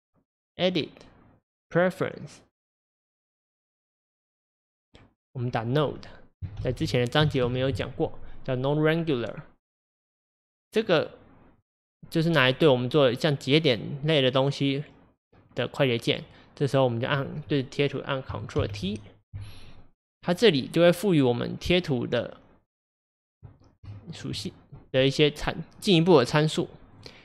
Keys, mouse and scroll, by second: 3.9-17.1 drag, 18.7 ctrl+t.